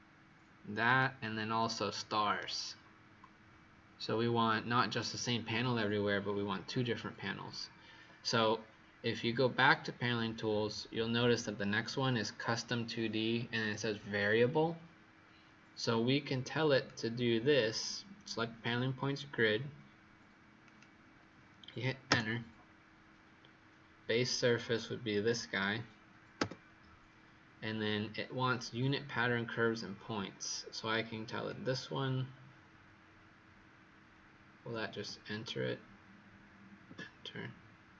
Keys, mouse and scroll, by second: 1.8 right click, 9.5 click, 22.0 Return, 25.1 click, 26.3 Return, 30.9 click, 34.9 Return.